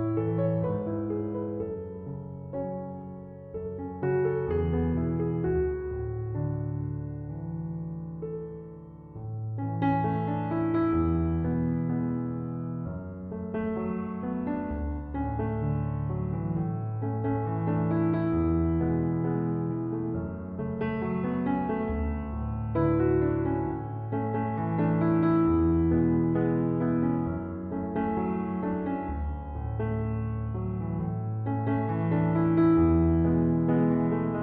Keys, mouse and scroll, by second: 5.1 Escape, 10.1 Escape, 11.3 Escape.